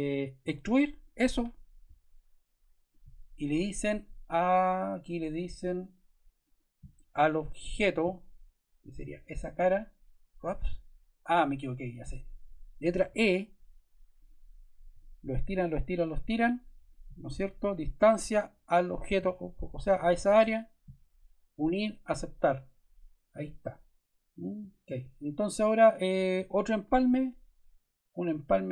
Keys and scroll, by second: 0.3 e, 12.9 e.